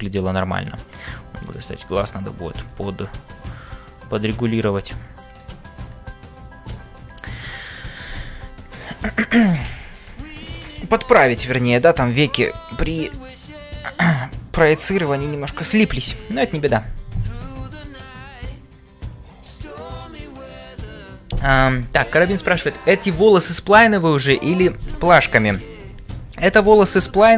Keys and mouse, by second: 0.0-27.3 typing, 0.0 ctrl+space, 3.0 middle click, 5.0 shift+middle click, 6.0 shift+middle click.